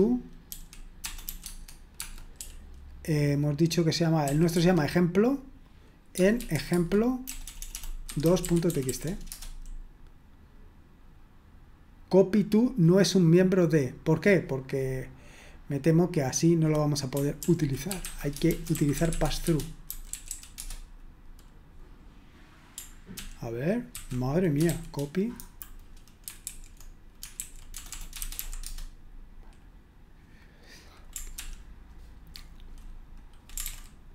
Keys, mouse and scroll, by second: 0.0-2.4 typing, 4.5 Tab, 4.5 typing, 6.3-9.8 typing, 15.3-16.5 scroll down 1, 17.4 ctrl+p, 17.8-21.1 typing, 23.2 ctrl+p, 23.9 ctrl+a, 24.7 shift+c, 25.3 Delete, 26.5 alt+f, 27.4 alt+f, 27.7-28.9 typing, 31.3 ctrl+p, 33.6 ctrl+super+c.